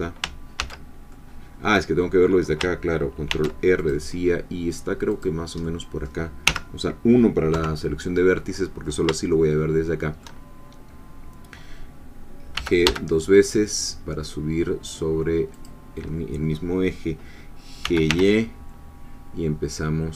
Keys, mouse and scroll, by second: 0.6 ctrl+z, 1.1-2.4 ctrl+middle drag, 3.3 ctrl+r, 3.8 ctrl+click, 5.1 click, 5.6 middle click, 6.5 1, 7.5 3, 8.6-9.0 scroll up 2, 9.3-10.7 shift+middle drag, 12.5 g, 15.5-17.8 drag, 17.8 g, 18.1 y.